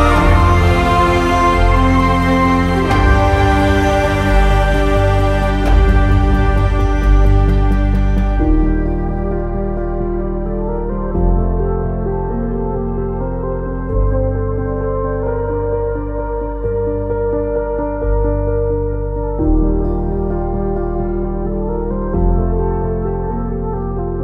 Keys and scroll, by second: 11.2 alt+x, 11.8 q, 13.4 Delete, 15.3 s, 15.6 BackSpace, 21.8 typing.